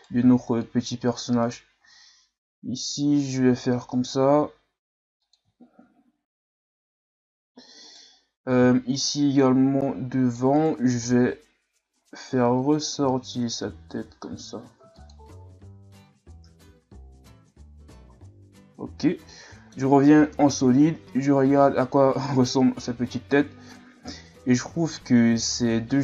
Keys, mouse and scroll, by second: 0.2 c, 1.8 g, 5.6 scroll down 2, 6.0-7.3 scroll up 1, 7.8 right click, 8.6 c, 11.0 g, 17.4 Tab, 18.1 a, 18.8 z, 19.0 scroll down 1, 19.3-20.3 middle drag, 20.3 KP_1, 22.7-23.4 scroll up 1, 23.4-24.5 scroll up 1, 25.4-26.0 scroll down 2.